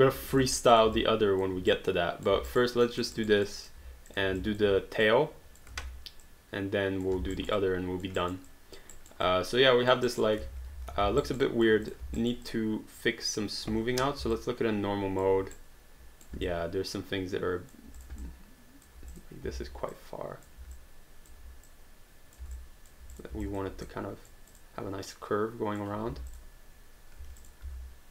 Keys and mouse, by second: 0.3 alt+click, 0.7 click, 1.5 alt+click, 1.7 right click, 2.5 alt+right click, 2.9 alt+middle click, 3.2 alt+right click, 3.5 alt+click, 4.1 click, 4.4 alt+click, 5.1 click, 5.8 ctrl+z, 6.2 click, 7.3 alt+right click, 7.6 alt+click, 8.2 alt+right click, 8.5 alt+click, 9.0 alt+right click, 9.2 alt+click, 10.1 alt+right click, 10.5 ctrl+z, 11.0 alt+d, 11.3 alt+right click, 11.4 alt+click, 11.9 click, 12.2 alt+right click, 12.5 alt+click, 14.4 alt+click, 15.5 right click, 16.5 alt+click, 18.0 click, 18.2 alt+click, 19.1 click, 19.9 click, 21.7 click, 23.1 click, 23.5 alt+click, 23.9 click, 26.3 click, 27.2 q, 27.4 click, 27.6 w.